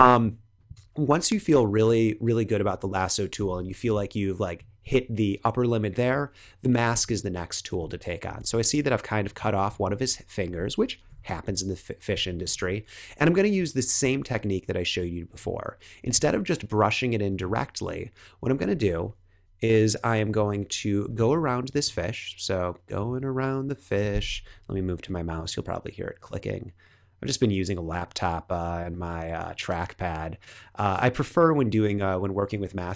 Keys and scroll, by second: 1.7 super+-, 2.6 super+=, 3.5 space, 7.6 space, 11.0 l, 12.3 shift+l, 13.7 shift+l, 19.4 BackSpace.